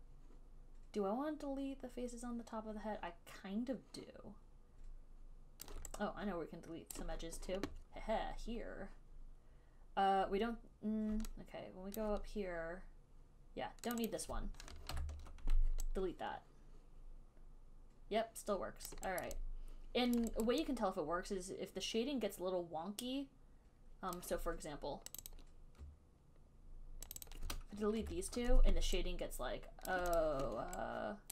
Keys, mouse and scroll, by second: 0.8 alt+click, 2.8 alt+right click, 5.9 alt+click, 7.2 click, 12.2 alt+click, 14.3 click, 14.4 click, 14.9 alt+click, 15.2 ctrl+Delete, 19.1 alt+click, 19.3 alt+click, 19.5 alt+right click, 20.4 alt+click, 20.7 alt+right click, 22.3 alt+right click, 24.4 alt+click, 25.5 click, 25.6 click, 25.7 alt+click, 27.4 shift+click, 27.6 shift+click, 28.3 ctrl+Delete, 30.2 alt+click, 30.5 click.